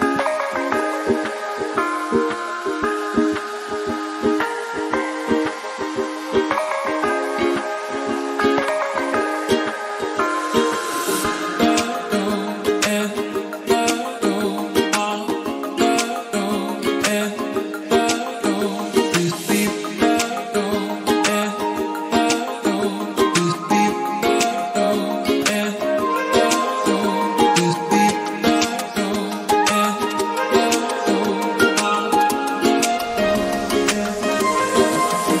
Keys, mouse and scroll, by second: 0.2-3.1 drag, 3.2-3.5 scroll down 2, 3.5 click, 5.0 click, 9.8 click, 12.6 click, 13.1 click, 22.0-22.6 scroll up 4, 24.0 scroll down 4, 24.6 click, 25.3-25.6 scroll down 2, 25.6 middle click, 25.9-26.3 scroll up 1, 26.3 click, 26.9-30.6 middle drag, 30.1 KP_7, 30.6-30.9 scroll up 2, 30.9 shift+middle click, 31.5 s, 33.1 click, 33.6 click, 34.3-35.4 middle drag.